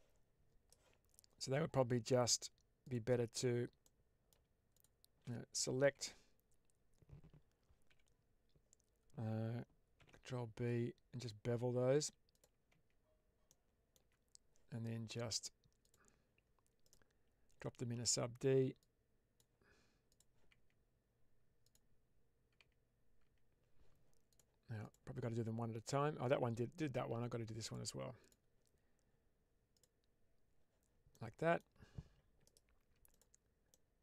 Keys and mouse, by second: 3.7-4.2 middle drag, 4.6 shift+click, 5.9 Tab, 7.8 a, 9.9 ctrl+b, 12.2 click, 12.6 Tab, 13.4 middle click, 13.9 Tab, 15.7-16.8 drag, 18.7-20.1 drag, 20.4 Tab, 21.6 click, 22.4 Tab, 24.7 Tab, 24.7 click, 27.5 click, 28.1-29.8 drag, 31.0-31.5 middle drag, 32.3 right click, 33.6-34.0 middle drag.